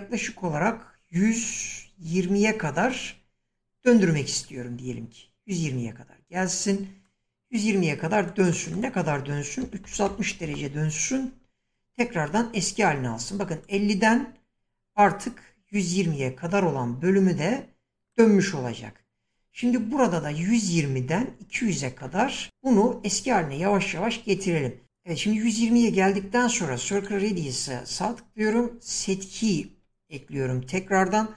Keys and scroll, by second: 9.4-10.5 typing.